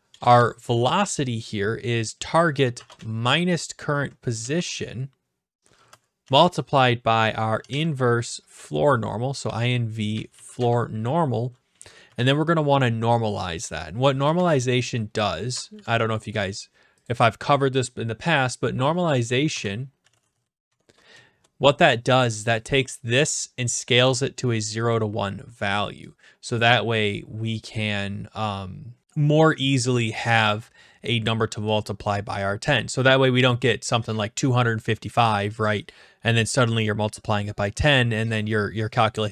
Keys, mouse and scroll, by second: 0.1 BackSpace, 0.2 BackSpace, 2.1 click, 2.8 (, 3.0-4.0 Right, 4.4 ), 6.2 typing, 7.3-8.1 typing, 9.4-10.8 typing, 12.0 ), 12.6 ), 13.7-14.7 drag, 14.4 (, 15.7 Delete, 17.0 click, 19.3-20.9 typing, 24.9-26.0 drag, 31.0-32.2 drag, 32.4-33.4 drag, 35.6 click.